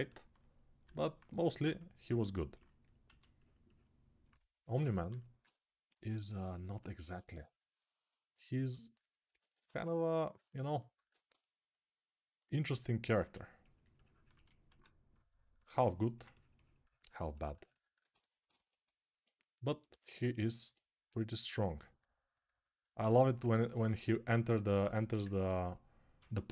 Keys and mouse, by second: 2.1-9.2 alt+shift+right drag, 2.8 1, 4.7 2, 9.2 [, 9.4 [, 9.5 [, 10.7 1, 14.5 2, 15.4-20.8 ctrl+right drag, 19.6 g, 26.1-26.5 ctrl+alt+shift+right drag.